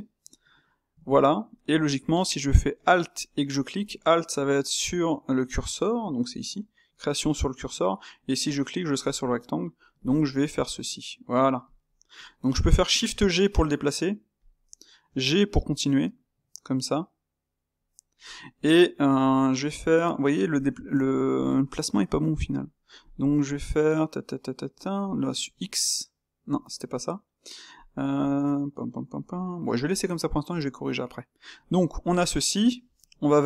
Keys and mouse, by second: 20.6-26.0 ctrl+middle drag, 31.5-33.4 middle drag.